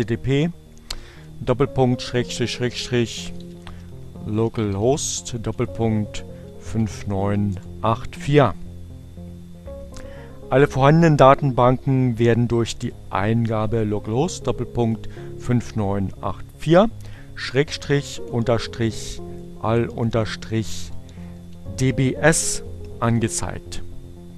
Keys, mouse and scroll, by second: 1.9-7.1 typing, 7.4 Return, 14.5 click, 15.3 shift+7, 17.8-21.0 typing, 22.8 Return.